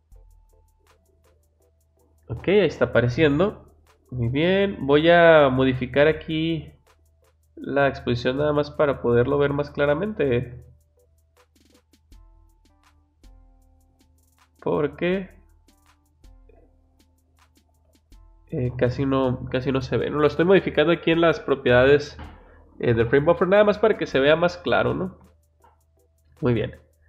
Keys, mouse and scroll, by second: 0.3-1.5 drag, 5.5 click, 6.7 click, 8.0-9.2 drag, 10.0 click, 10.8 click, 11.2 click, 12.8-14.6 drag, 15.5-16.9 drag, 17.2-18.5 drag, 26.3 click.